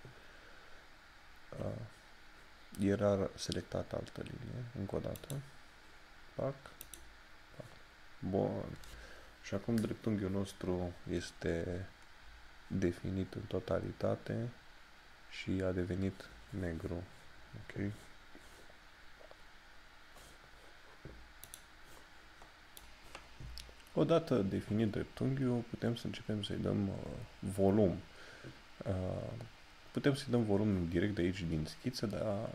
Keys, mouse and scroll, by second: 5.2 click, 21.6 click, 26.3 scroll down 1.